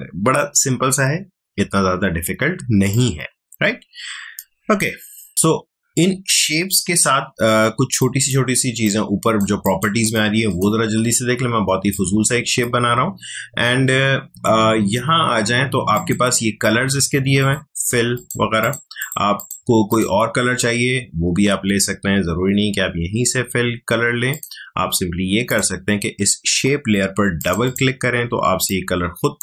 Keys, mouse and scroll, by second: 2.9-5.3 drag, 8.0-15.2 drag, 15.9 click, 24.3-29.4 drag.